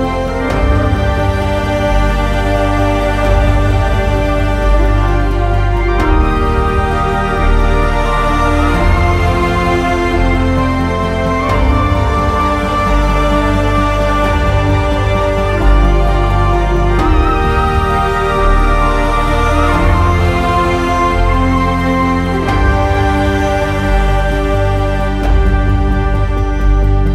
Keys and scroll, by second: 26.8 w.